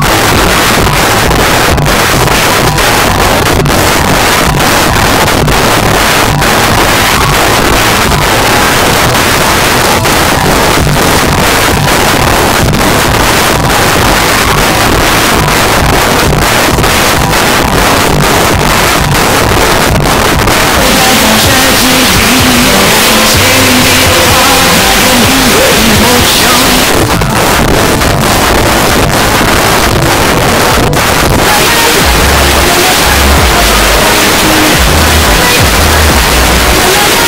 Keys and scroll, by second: 0.4 Down, 0.9 Return, 26.8 Page_Down.